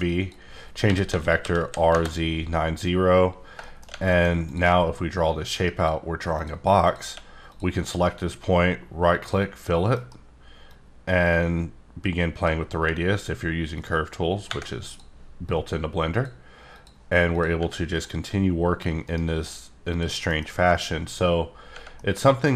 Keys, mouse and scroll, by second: 0.0 click, 0.9 r, 1.1 z, 1.2 KP_4, 1.4 KP_5, 1.8 KP_Enter, 3.6 shift+middle click, 4.0 middle click, 4.4 click, 5.1 click, 6.8 click, 7.5 click, 7.9 right click, 9.2 click, 9.9 F9, 10.7-12.5 drag, 13.7 click, 14.9 click, 15.8 click, 16.7 click, 17.3 click, 17.9 click, 19.0 right click, 19.9 click, 20.3 F9, 21.9 middle click.